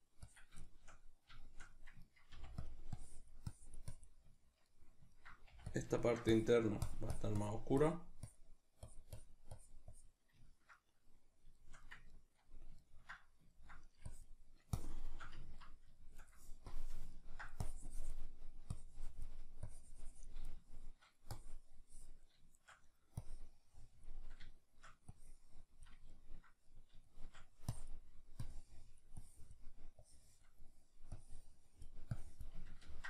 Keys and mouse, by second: 0.7-2.7 shift+middle drag, 2.4 f, 2.7 click, 4.4-5.8 ctrl+middle drag, 5.5 f, 5.8 click, 6.0 ctrl+middle click, 6.3-10.4 drag, 10.4-14.1 ctrl+middle drag, 14.1-15.4 drag, 15.4-16.7 ctrl+middle drag, 16.7 click, 17.1 ctrl+middle click, 17.7-20.6 drag, 20.6 shift+middle click, 21.4-24.6 drag, 24.6 shift+middle click, 25.2-26.5 drag, 26.5-27.7 ctrl+middle drag, 27.7-32.7 drag, 32.7-33.0 ctrl+middle drag.